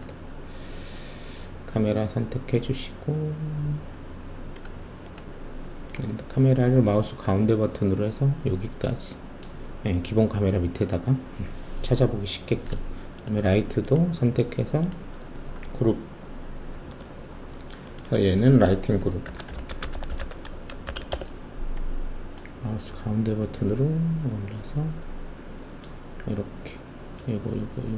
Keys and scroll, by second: 17.9 ctrl+g, 19.3-20.8 typing, 21.1 Return.